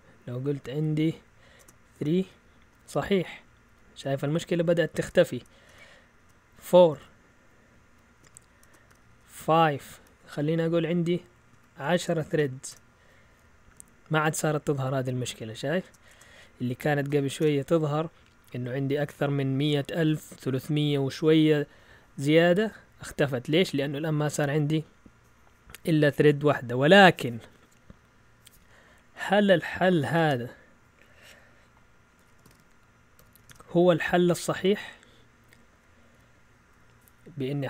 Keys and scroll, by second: 0.5 Left, 1.1-1.6 Left, 1.6 BackSpace, 1.9 BackSpace, 2.1 Return, 2.7 Up, 2.9 Left, 3.3-4.0 typing, 4.6 Right, 5.5 BackSpace, 5.7 4, 6.2 Return, 6.7 Up, 7.0 Left, 7.5-17.1 typing, 9.0 Return, 9.8 Up, 10.0 Left, 11.5 Right, 13.7 Up, 13.9 Left, 17.4 Return, 19.4-20.1 typing, 29.7-30.6 typing, 31.9-35.7 typing.